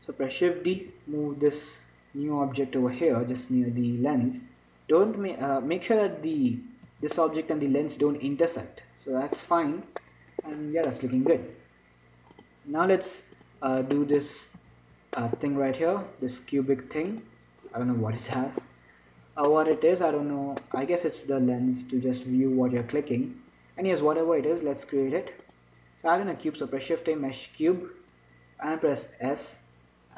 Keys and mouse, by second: 1.1 shift+d, 7.1 z, 7.7 middle click, 8.9 middle click, 10.1-12.7 middle drag, 13.8 click, 14.8 z, 15.5-17.4 middle drag, 17.4 right click, 18.0-19.2 drag, 19.2-22.9 middle drag, 24.7 shift+a, 27.0 shift+a, 29.7 s.